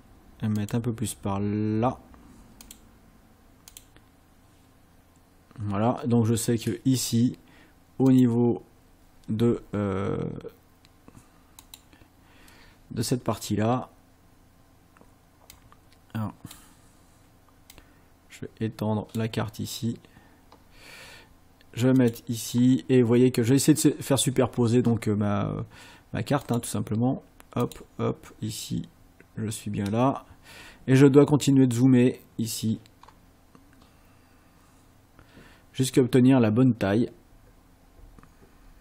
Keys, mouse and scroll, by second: 0.6 click, 2.6 click, 3.7 click, 8.1 click, 11.6 click, 15.6-16.7 drag, 17.8-19.4 drag, 22.0 click, 26.5 click, 27.7 click, 33.0 scroll up 2, 34.6-34.9 scroll up 2, 35.9-36.2 scroll up 2, 37.3-37.8 scroll up 4.